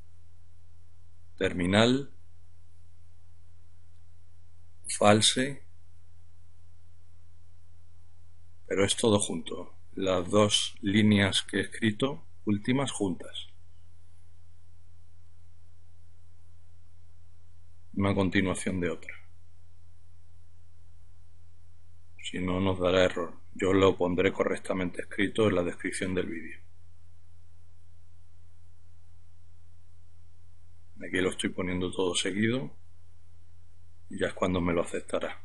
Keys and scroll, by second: 0.0-1.1 typing, 3.0-4.8 typing, 5.0 Return, 7.4 typing, 9.2 Up, 10.9 Up, 14.5 typing, 26.9-29.3 typing, 34.0-35.1 typing.